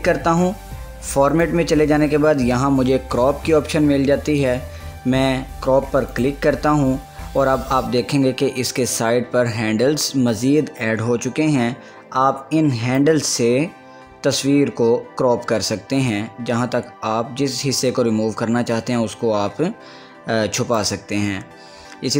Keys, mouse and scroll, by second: 0.0 click, 6.3 click, 13.2-22.1 drag.